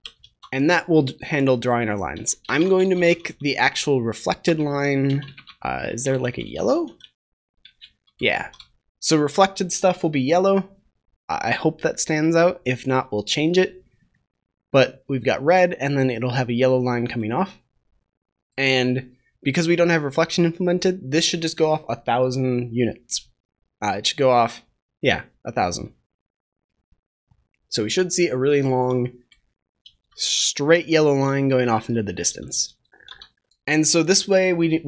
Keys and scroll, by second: 0.1 ctrl+s, 7.6 Return, 8.3 ctrl+s.